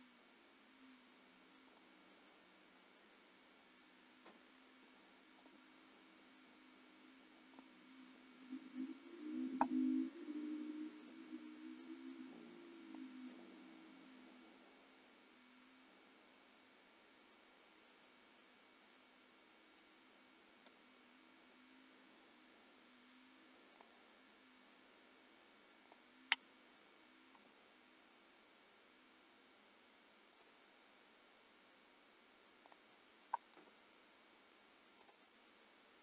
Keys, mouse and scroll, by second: 4.0 a, 4.3 i, 7.6 click, 7.9 scroll down 2, 8.2 middle click, 9.5 middle click, 9.8 middle click, 13.1 click, 21.1 middle click, 23.8 middle click, 23.8 click, 24.1 scroll up 3, 24.7 middle click, 25.9 click, 27.5 g, 31.5-31.9 scroll down 2, 31.9-32.7 scroll up 2, 32.7 click, 33.7 g, 35.3 middle click.